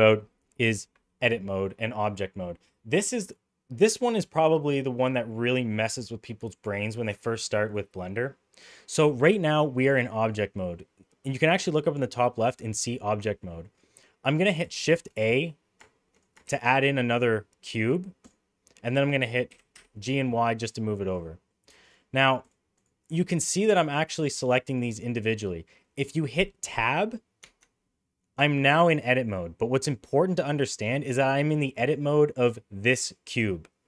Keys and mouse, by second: 16.4 shift+a, 19.4 g, 21.5 middle click, 21.7 shift+middle click, 21.9 middle click, 23.0 click, 23.8 click, 24.3 click, 24.7 click, 24.9 click, 27.4 Tab, 29.5 middle click.